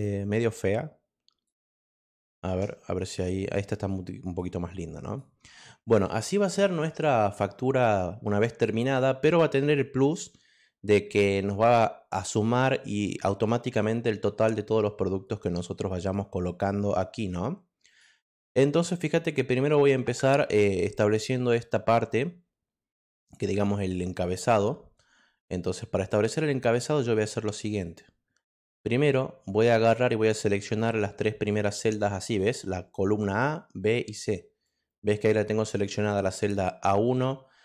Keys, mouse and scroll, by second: 0.6 click, 1.9 ctrl+middle click, 1.9 ctrl+scroll up 3, 2.1 ctrl+middle click, 3.5 click, 5.0 click, 5.8 click, 17.8 click, 18.5 middle click, 18.5-18.9 scroll down 1, 26.6-32.3 drag, 34.6-36.1 drag.